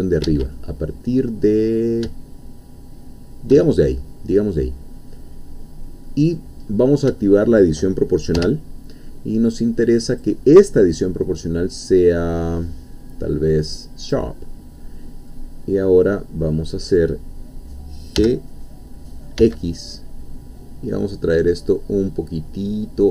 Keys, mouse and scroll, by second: 0.3 Escape, 0.5-1.9 middle drag, 3.7-4.4 shift+scroll down 3, 4.4-6.5 middle drag, 6.7-7.1 scroll up 1, 7.2-8.3 shift+middle drag, 8.4 o, 10.1-11.6 drag, 14.0 click, 15.3-17.0 middle drag, 18.2 g, 19.4 x, 20.7-21.3 scroll up 2, 22.8 scroll up 2.